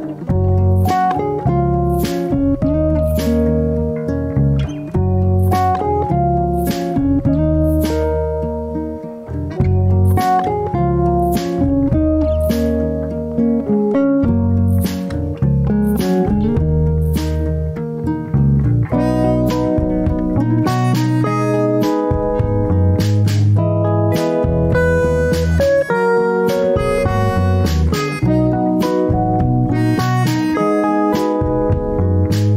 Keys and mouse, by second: 5.6 ctrl+r, 10.6 ctrl+r, 14.2 middle click, 15.3-16.7 middle drag, 17.6 ctrl+r, 23.2 middle click, 24.3-25.2 middle drag, 25.6 shift+middle click, 26.6 middle click, 28.8 ctrl+r.